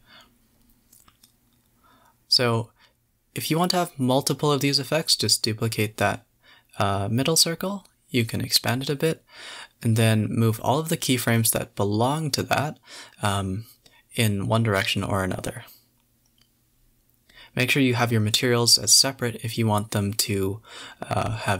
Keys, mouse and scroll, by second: 0.2 a, 0.4 a, 1.4 g, 2.5 click, 2.6 g, 5.1 KP_0, 6.1 space, 7.6 click, 7.8 click, 8.1 scroll up 2, 8.6 shift+d, 8.8 s, 14.6 click, 15.1 click, 18.1 click, 18.8 scroll up 2, 19.4 a, 19.5 a, 21.0 g.